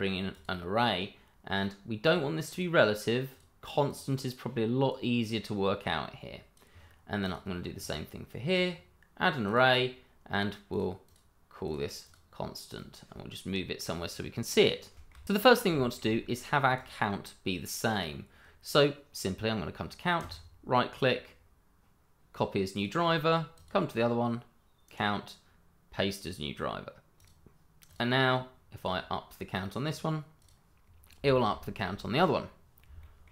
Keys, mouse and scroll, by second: 2.5 double click, 3.3 click, 11.0 double click, 11.6 click, 12.0 double click, 12.7 click, 14.9 shift+middle click, 15.7 shift+middle click, 16.3 scroll up 1, 16.7 click, 20.1 right click, 22.7 click, 24.8 right click, 27.1 click, 30.8 scroll down 1, 31.3 shift+middle click, 33.0 shift+middle click.